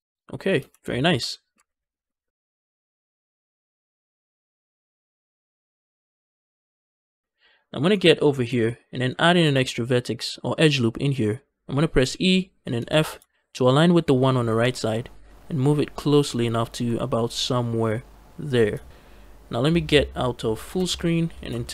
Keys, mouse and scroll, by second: 0.4 z, 0.7 scroll down 2, 0.9 shift+middle click, 1.2 middle click, 1.4 Tab, 1.6 scroll down 1, 1.8 shift+middle click, 2.1 middle click, 2.8-3.4 scroll up 2, 3.6 ctrl+space, 4.9 KP_0, 5.8 ctrl+space, 6.3 scroll down 2, 6.7 shift+middle click, 6.9-7.8 scroll up 4, 7.2 shift+middle click, 7.8 Tab, 8.2 shift+middle click, 8.5 scroll down 2, 8.7 scroll up 1, 9.3 ctrl+r, 11.9 e, 18.4 shift+click, 20.5 ctrl+space, 21.5 shift+middle click.